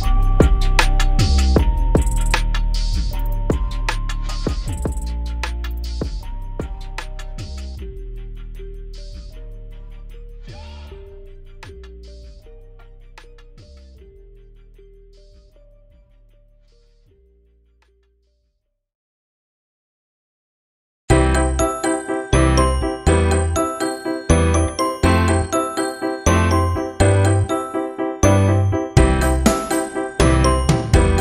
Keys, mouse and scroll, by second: 0.4 scroll up 1, 1.8 click, 8.3 click, 8.5 scroll down 1, 9.1 alt+scroll up 1, 9.8 alt+scroll down 1, 10.6 scroll up 1, 10.8 scroll down 1, 12.2 right click, 12.7 click, 13.4 alt+click, 16.1-16.9 scroll down 1, 17.6-18.0 alt+scroll up 1, 18.1 alt+shift+click, 23.5 alt+scroll down 1, 26.7-31.2 drag.